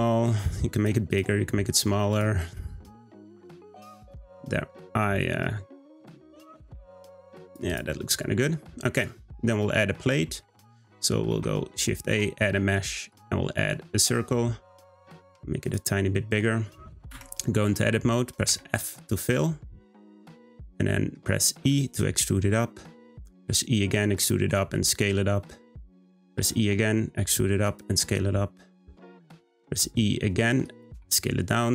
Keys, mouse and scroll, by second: 1.1 click, 1.9 Tab, 2.1 click, 2.5-5.7 middle drag, 5.7-6.2 scroll up 2, 6.4 click, 6.7 g, 7.7 click, 8.0-8.7 scroll down 2, 9.1-11.3 shift+middle drag, 11.3 shift+a, 14.6 s, 17.1 Tab, 18.4 f, 20.3-20.9 scroll up 2, 20.9 middle click, 21.6 e, 23.3 e, 24.5 s, 26.4 e, 27.9 s, 29.6 e, 30.9 s.